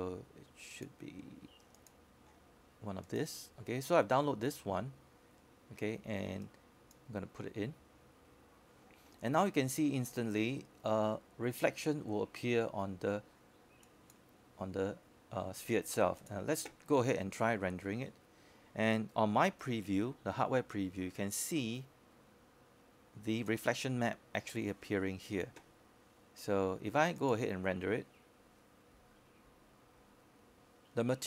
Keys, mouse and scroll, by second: 6.1-6.8 scroll up 1, 6.8-11.7 drag, 22.0-23.4 scroll up 1, 23.7-27.6 alt+drag.